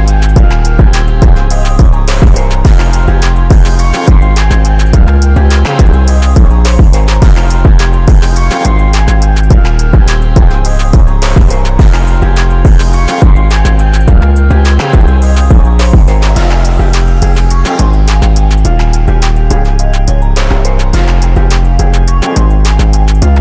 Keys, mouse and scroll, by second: 6.3 click, 6.4 right click, 6.5 click, 7.1-9.2 drag, 9.2 ctrl+t, 9.5-10.8 drag, 10.8-12.2 drag, 12.2 shift+click, 13.0 right click, 13.3 click, 13.9 right click, 14.1-19.1 drag, 22.5 click.